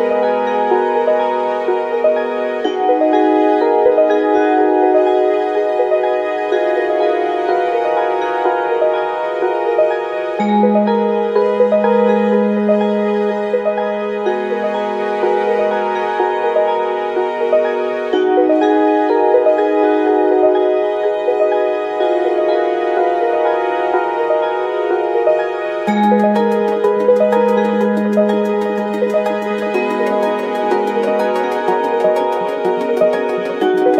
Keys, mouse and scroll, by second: 0.2 click, 1.4 g, 3.9 ctrl+z, 6.0 KP_7, 7.4 g, 7.5 f, 7.6 click, 8.7 click, 8.7 right click, 9.4 KP_1, 9.8-12.3 middle drag, 10.2 KP_1, 10.5 shift+z, 12.1 f, 12.3-17.7 right drag, 13.1 k, 13.7 shift+z, 14.0 ctrl+click, 14.4 ctrl+z, 14.6 f, 15.2-17.7 drag, 18.1 g, 20.1 g, 20.7 shift+z, 23.0 KP_1, 23.2 shift+z, 24.8 k, 30.1 ctrl+z, 30.3 f, 30.5 right click, 31.0 ctrl+z, 32.0 ctrl+z.